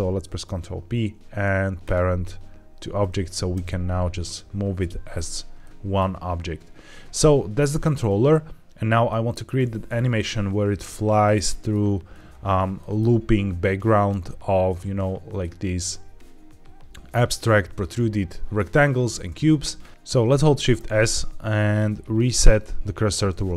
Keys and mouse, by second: 0.1 ctrl+p, 3.4 g, 4.1 Escape, 5.5 middle click, 9.0 middle click, 10.1-11.6 middle drag, 12.7 shift+middle click, 20.7 shift+s.